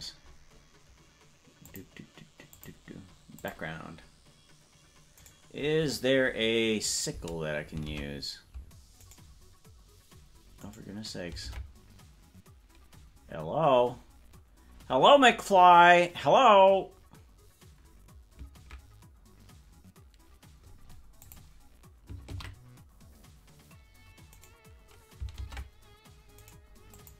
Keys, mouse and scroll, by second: 1.6 click, 2.5 click, 4.1 click.